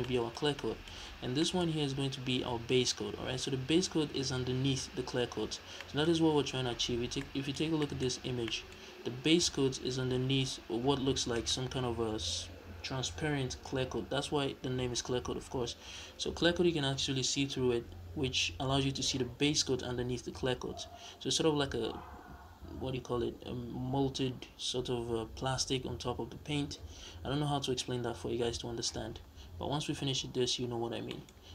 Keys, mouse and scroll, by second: 5.4 scroll down 2, 6.8 scroll down 2, 8.0 scroll up 1, 8.8-9.2 scroll up 1, 29.1-29.4 scroll down 1, 29.4-31.0 scroll up 1, 31.0 middle click, 31.2 scroll up 1.